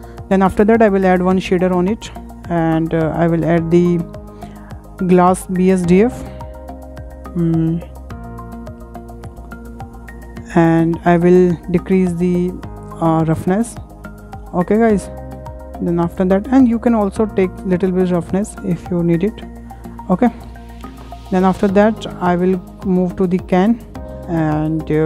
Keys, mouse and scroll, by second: 1.4-7.1 drag, 10.4-10.8 scroll up 3, 10.8-11.9 shift+middle drag, 11.9 click, 13.5-15.0 scroll down 25, 15.0 shift+middle click, 15.5 scroll up 6, 15.9-17.8 shift+middle drag, 17.8-20.0 drag, 20.0-20.4 scroll down 5, 20.4-20.8 shift+middle drag, 20.8-21.2 scroll up 5, 21.2 shift+middle click, 21.9-22.2 scroll up 4, 22.2-22.9 shift+middle drag, 22.9 scroll up 5, 23.1 shift+middle click, 23.7 scroll down 6, 23.9-24.2 shift+middle drag, 24.2-24.5 scroll up 4, 24.5 shift+middle click.